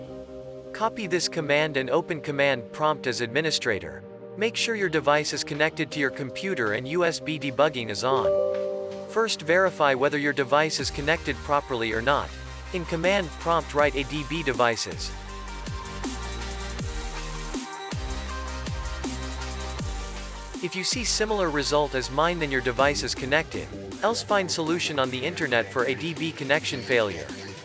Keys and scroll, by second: 3.4-5.0 typing.